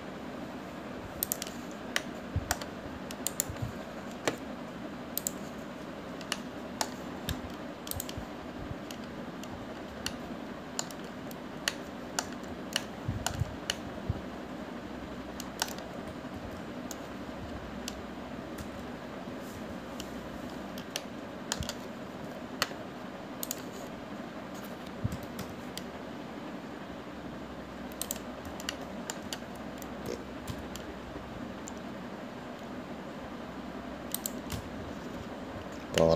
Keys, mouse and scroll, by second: 2.7 click, 3.3-4.5 middle drag, 4.5-7.7 right drag, 7.7-9.2 middle drag, 9.2 click, 10.1-10.8 scroll down 1, 10.8-11.3 scroll up 1, 11.3-17.7 middle drag, 17.7 ctrl+z, 18.8-19.9 scroll up 2, 19.9 ctrl+z, 20.9 ctrl+z, 22.3-24.8 middle drag, 24.8 click, 29.9-31.3 shift+middle drag, 31.3 g.